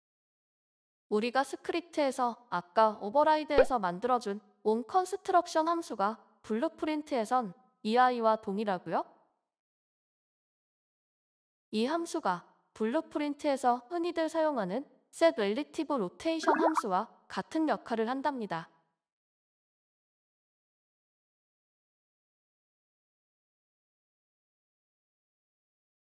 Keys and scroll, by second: 9.6-11.8 typing.